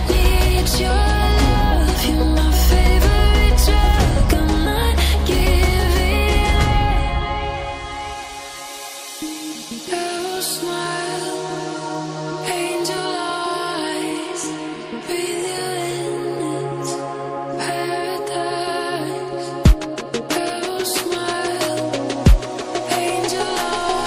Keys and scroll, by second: 1.1 ctrl+BackSpace, 1.6 alt+BackSpace, 2.5 alt+BackSpace, 3.7 ctrl+z, 4.2 ctrl+z, 4.5 ctrl+d, 10.3 ctrl+j, 11.2 ctrl+t.